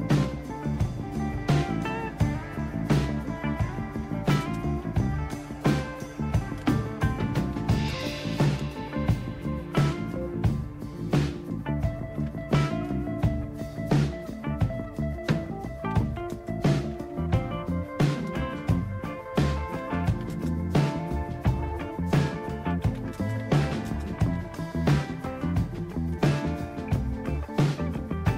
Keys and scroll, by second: 4.1 typing, 5.2-8.8 typing, 5.3 Return, 12.3 typing, 15.9 typing, 17.2-18.1 typing, 19.5-25.1 typing, 26.1 typing.